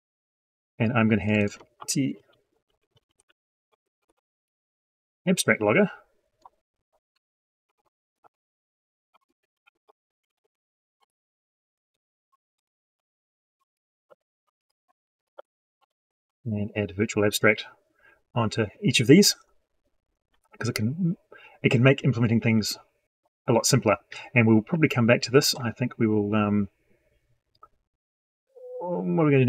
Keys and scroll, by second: 11.8 ctrl+shift+Left, 12.8 ctrl+c, 13.3 ctrl+v.